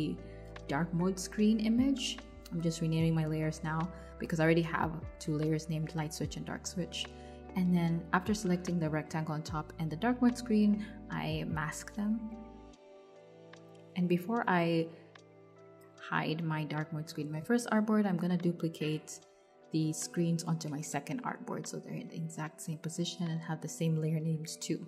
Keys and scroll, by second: 0.0-4.2 typing, 4.5 Return, 14.4 super+c, 17.9 super+c, 19.1 BackSpace, 19.8 super+v.